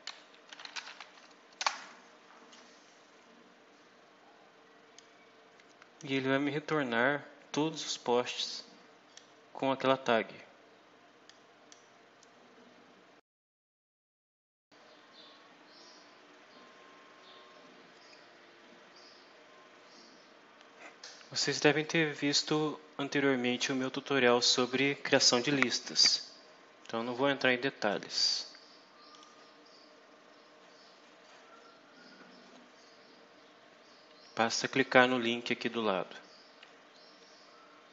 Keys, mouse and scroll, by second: 0.0-1.3 typing, 1.5 Return, 4.8-6.0 drag, 8.2 click, 11.2 click, 13.8 Return, 14.5 click, 16.0 click, 16.8 click, 17.0 click, 17.6 click, 17.8 click, 18.3 click, 18.4-22.5 typing, 20.8 click, 21.0 click, 21.2 click, 22.4 click, 22.8 click, 23.2 click, 26.0 click, 26.3 click, 28.5-29.3 typing, 29.4 Down, 29.7 Return, 30.2-31.4 drag, 31.7 click, 31.8 s, 32.2 Down, 32.2 Up, 32.5 Return, 33.4 click, 33.8 v, 34.2 Return, 34.5 click, 35.5 click, 35.8 click, 36.2 click, 36.9 click, 37.4 click, 37.7 click.